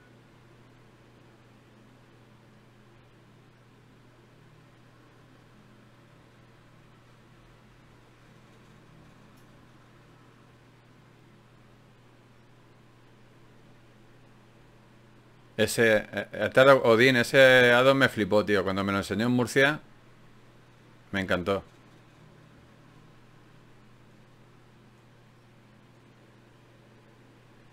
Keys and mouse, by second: 0.6 click, 4.3-6.7 drag, 4.3 d, 12.7 shift+q, 18.8 ctrl+Up, 24.1 n.